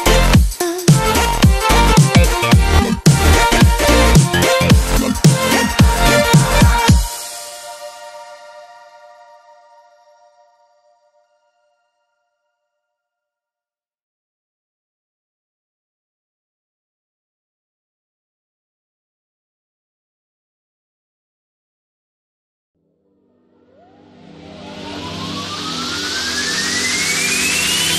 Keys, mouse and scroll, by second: 1.7 click, 2.9 ctrl+z, 4.4 click, 5.1 ctrl+z, 6.3-7.1 drag, 7.7-8.2 alt+shift+click, 8.6 Right, 9.3 Down, 10.4 Left, 11.3 Right, 11.7-14.1 drag, 21.7 click, 23.4 ctrl+-, 24.1 space, 25.1 Up, 26.1 click, 26.3 space, 26.6 click, 26.6 space, 27.2 click.